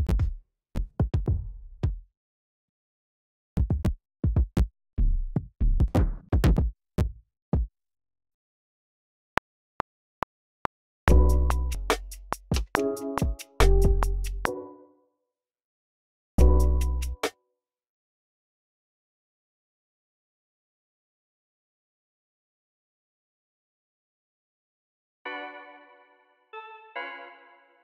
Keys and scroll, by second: 0.0-1.1 typing, 1.7 super+r, 3.4 Down, 3.6-4.4 typing, 4.8 Down, 5.3 Down, 5.5-6.9 typing, 7.4 super+r, 8.0 v, 8.8 super+k, 9.3 r, 10.3 super+k, 11.0-15.1 typing, 14.4 super+k, 15.8 super+a, 16.7 super+r, 16.9-18.1 typing, 19.4 v, 19.6 x, 20.8 alt+super+s, 21.3-22.2 typing, 24.8-25.2 typing.